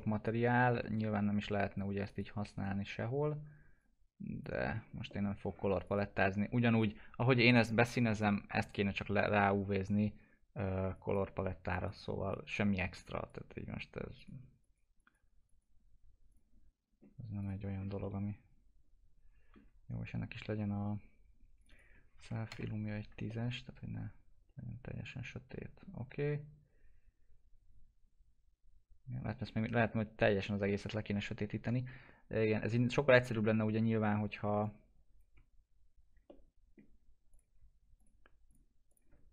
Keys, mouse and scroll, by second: 2.0 click, 2.5 right click, 3.8 click, 4.8-5.1 scroll up 1, 5.1 middle click, 5.4-5.8 scroll up 1, 5.8 click, 9.2 click, 17.6 scroll down 1, 18.0-21.6 alt+middle drag, 21.6 click, 22.1 typing, 23.2-34.4 alt+middle drag, 34.6-36.2 shift+drag, 36.2 alt+middle click, 37.3 click.